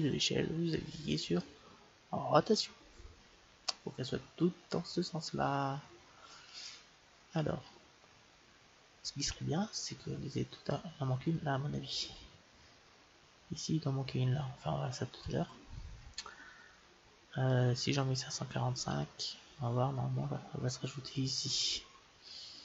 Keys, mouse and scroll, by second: 2.5-4.3 drag, 3.6-5.5 middle drag, 12.5-14.2 middle drag, 14.2-14.9 scroll down 1, 15.3-17.1 middle drag.